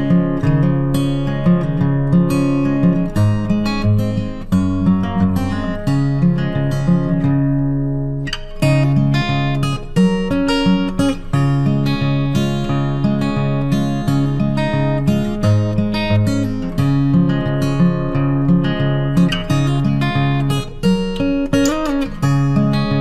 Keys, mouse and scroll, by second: 0.9 click, 4.6 click, 8.7 click, 10.8 click, 12.5 click, 15.4 r, 21.7 alt+Num_Lock, 21.8 alt+click.